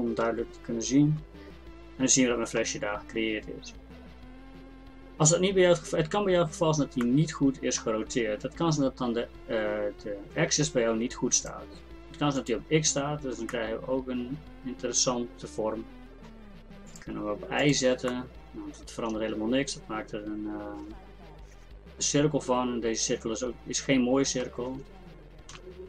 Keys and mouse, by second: 7.1-10.5 drag, 11.4-24.7 drag, 18.1 right click, 24.7 Tab, 25.2 Tab, 25.5 z.